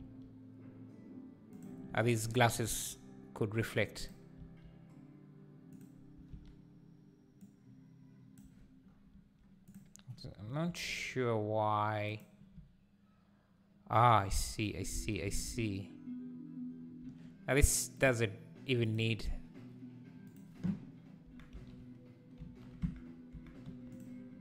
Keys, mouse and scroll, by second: 3.3 g, 5.5 s, 7.5 click, 12.1 click, 15.2 Tab, 17.0 Tab, 17.9 click, 18.9 click, 21.2 Tab, 21.5 a, 22.4 shift+n, 22.8 Tab, 23.3 Tab, 23.6 3, 23.9 click.